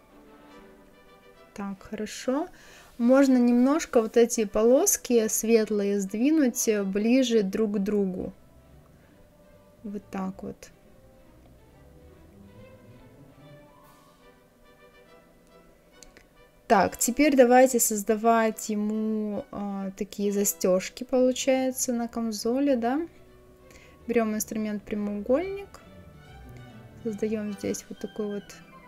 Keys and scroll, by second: 13.2 Left.